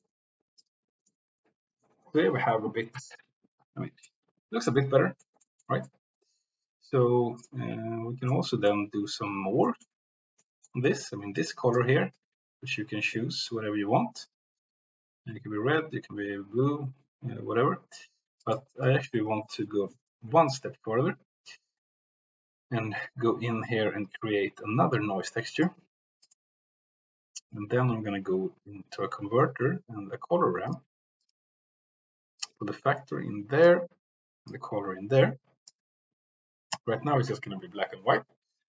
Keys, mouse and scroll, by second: 0.5 click, 1.0 middle click, 2.5 middle click, 3.2 click, 4.0-5.2 drag, 5.4 click, 8.5-8.8 drag, 9.8 middle click, 10.3 middle click, 11.0 drag, 11.6 click, 12.1-18.0 drag, 18.5 click, 18.7 click, 20.2 Delete, 24.3-26.4 drag, 27.5-31.3 drag, 32.3-33.7 drag, 34.7-35.8 drag.